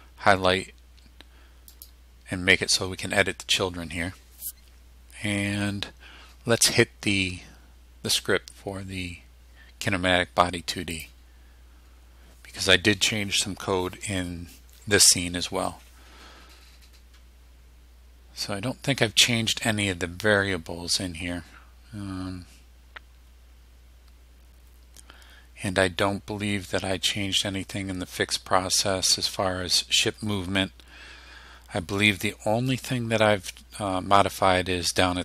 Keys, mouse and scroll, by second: 1.7 click, 11.0 click, 18.3 scroll down 2, 18.9 scroll up 2, 21.7-22.0 scroll down 2, 24.4 scroll down 2, 26.0 scroll down 2, 27.3 scroll down 2, 28.6-29.0 scroll down 2, 29.4 scroll down 2, 30.0 scroll down 2, 30.6-30.9 scroll down 2.